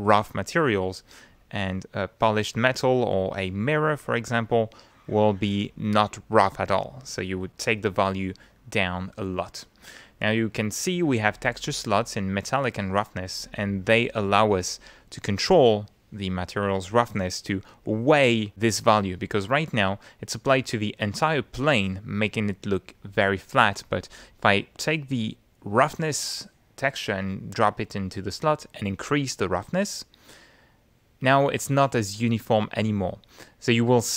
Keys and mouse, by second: 11.3 click, 12.0 click, 19.4-21.3 drag, 25.2-27.5 drag, 28.6-31.7 drag, 32.4-34.1 middle drag.